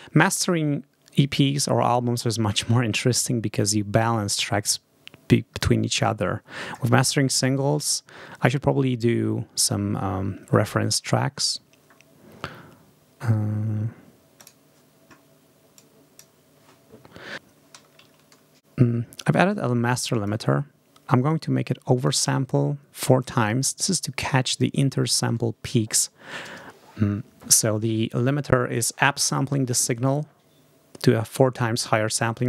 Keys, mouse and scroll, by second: 2.4 right click, 6.1-7.1 scroll down 4, 10.4-11.0 scroll down 2, 11.2-12.0 scroll up 2, 14.3 click, 15.6 click, 18.0 ctrl+scroll down 2, 19.4 click, 21.2 click.